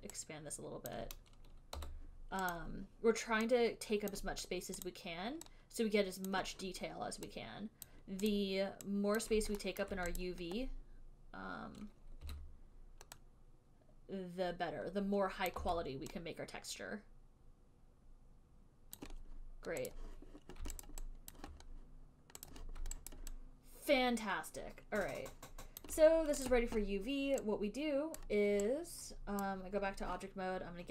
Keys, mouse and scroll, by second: 1.8-2.6 typing, 2.1 click, 2.9 click, 4.4 click, 5.2 click, 6.6 click, 8.2 click, 8.7 click, 9.5 click, 10.1 alt+middle click, 10.5 click, 12.5 e, 15.8 click, 15.9 w, 19.3 click, 20.2 click, 21.2 alt+right click, 21.7 alt+click, 21.9 alt+click, 22.8 click, 23.4 alt+click, 26.1 alt+click, 26.8 click, 28.6 right click, 29.8 right click.